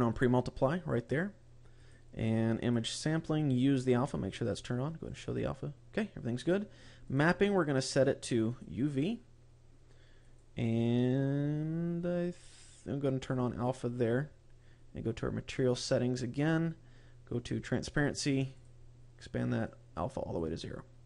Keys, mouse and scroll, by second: 0.0 click, 1.7 click, 2.4 click, 4.2 click, 5.0 click, 6.9 click, 7.6 click, 10.1 click, 11.2-11.6 scroll down 2, 13.1 click, 13.9-14.6 scroll up 4, 15.4 click, 16.3-16.8 scroll down 6, 17.6 click, 18.4 click, 19.6 click, 20.6-21.0 scroll up 3.